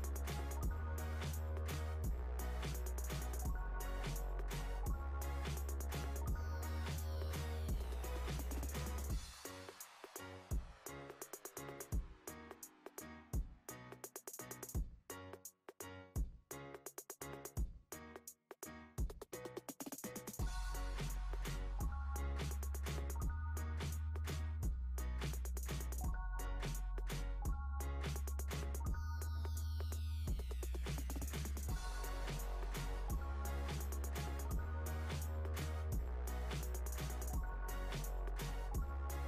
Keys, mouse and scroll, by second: 0.9 click, 1.4 b, 2.8 click, 6.2 KP_7, 7.6 click, 8.6 b, 10.4 click, 12.5 click, 12.8 b, 14.4 click, 18.2 Tab, 18.9 click, 19.7-20.8 scroll up 2, 20.8 click, 21.9 click, 24.6 click, 25.9 click, 31.1 Tab, 32.9 click, 34.0 click, 34.9 click, 37.0 KP_3.